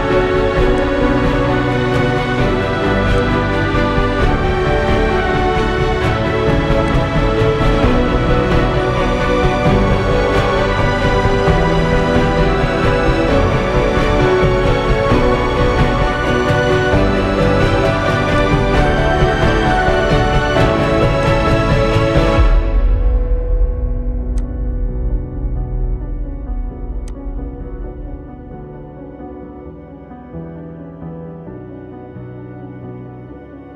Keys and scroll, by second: 19.7 ctrl+i.